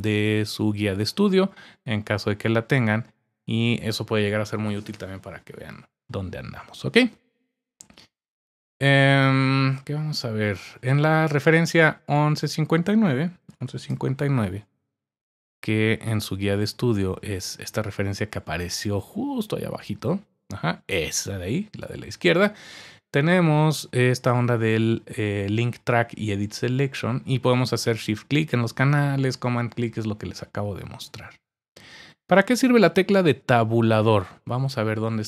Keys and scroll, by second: 13.2-14.4 typing.